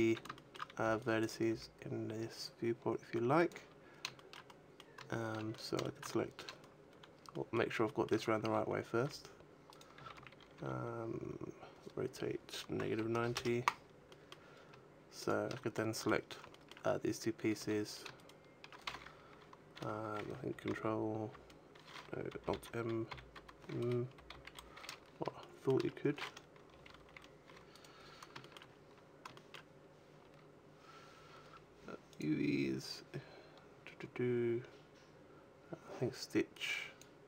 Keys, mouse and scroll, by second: 0.2 shift+middle click, 0.6 b, 1.4 g, 3.4 click, 4.0 shift+middle click, 4.3 middle click, 5.4 middle click, 7.2 middle click, 7.7 shift+middle click, 8.9 r, 9.7 right click, 9.8 a, 10.0 a, 10.4 r, 13.8 middle click, 15.0 shift+right click, 15.6 middle click, 16.4 shift+middle click, 17.3 a, 17.6 right click, 17.9 shift+right click, 20.5 ctrl+m, 27.7 right click, 28.3 shift+middle click, 28.6-29.2 scroll up 5, 29.2 shift+middle click, 30.1 scroll down 3, 31.9 click.